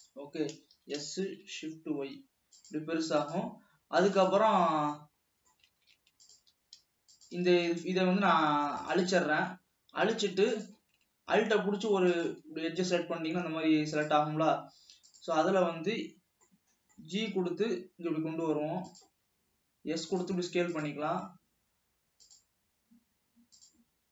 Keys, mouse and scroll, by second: 1.1 s, 4.6 s, 5.0 scroll up 1, 5.2-6.1 middle drag, 6.1 alt+a, 6.5 alt+click, 7.4 shift+drag, 7.9 x, 11.0 drag, 12.3 alt+click, 13.2-14.4 scroll down 2, 15.7 scroll down 2, 16.8 middle click, 17.4 g, 19.6 s.